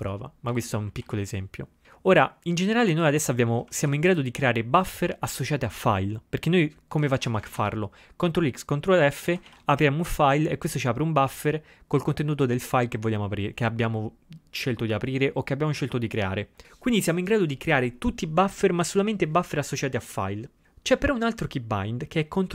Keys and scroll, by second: 7.2 ctrl+x, 7.4 o, 7.5 ctrl+x, 7.7 0, 9.4 ctrl+x, 9.5 ctrl+f.